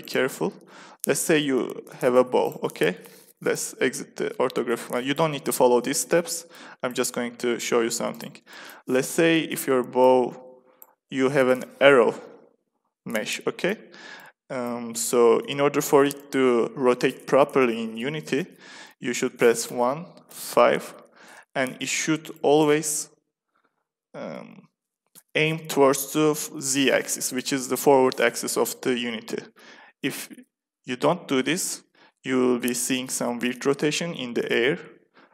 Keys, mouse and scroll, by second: 1.3 r, 3.4 KP_5, 7.2 s, 9.9-13.0 drag, 13.6 middle click, 14.4-18.4 middle drag, 19.6 KP_1, 20.2 KP_5, 23.1 middle click, 23.4 middle click.